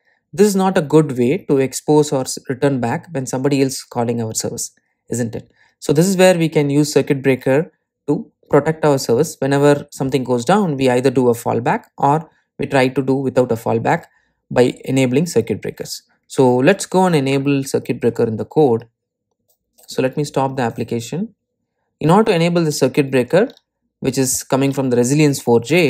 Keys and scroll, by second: 21.3 super+F2.